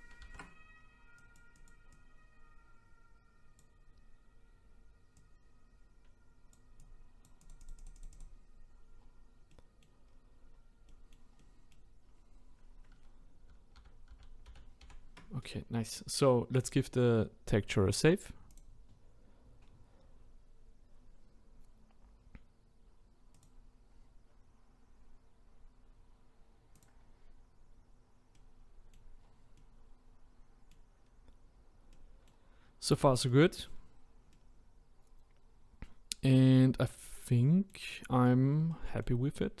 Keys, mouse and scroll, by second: 0.2 ctrl+z, 1.2-5.1 drag, 5.2 click, 8.9-9.5 scroll down 2, 9.5-10.0 middle drag, 10.0 scroll up 1, 10.5-10.9 scroll down 4, 10.9-13.4 middle drag, 13.4 ctrl+z, 13.8 ctrl+z, 14.1 ctrl+z, 14.5 ctrl+z, 16.6-19.7 drag, 28.3-29.2 middle drag, 29.2-29.5 scroll down 2, 29.5-31.0 middle drag, 31.0-31.9 scroll up 2, 31.9-32.7 middle drag, 32.7-33.0 scroll down 2, 33.0-33.7 middle drag, 33.7-34.3 scroll up 2, 34.3-39.6 middle drag.